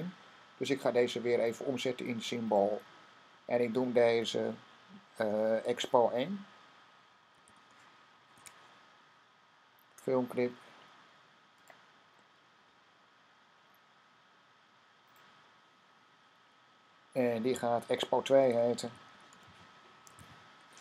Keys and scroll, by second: 5.8 typing, 7.0-8.3 typing, 18.1-20.0 typing.